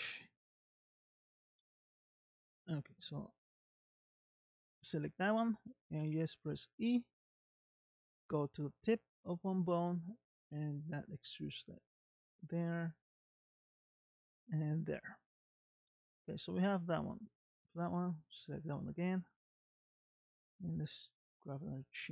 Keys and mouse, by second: 2.0 click, 6.1 e, 10.2 click, 11.5 e, 12.7 e, 15.4 middle click, 17.1 middle click, 17.8 click, 19.3-20.8 middle drag, 22.0 e.